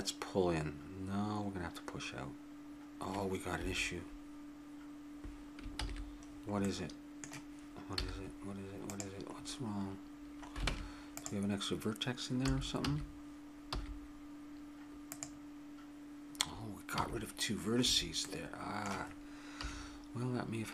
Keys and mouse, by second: 5.8 ctrl+z, 6.6 middle click, 8.0 z, 8.3 middle click, 10.7 ctrl+Tab, 12.4 a, 12.8 a, 13.7 w, 17.0 a, 17.9 a, 19.6 KP_3.